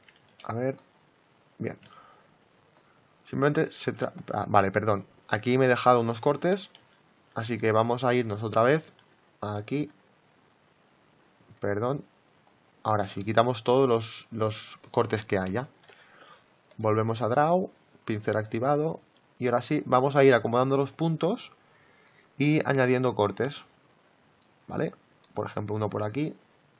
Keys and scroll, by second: 3.7 ctrl+z, 6.7 ctrl+z.